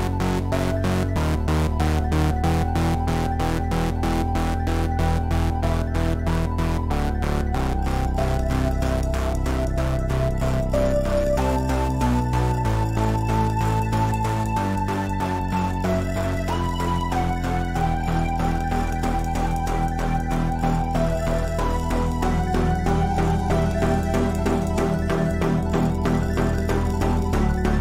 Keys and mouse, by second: 0.2 z, 1.3 z, 1.7 a, 3.1 Tab, 8.5-9.0 middle drag, 9.5 a, 12.7 shift+a, 16.1-17.9 drag, 17.9 KP_1, 21.3 middle click, 27.5-27.8 drag.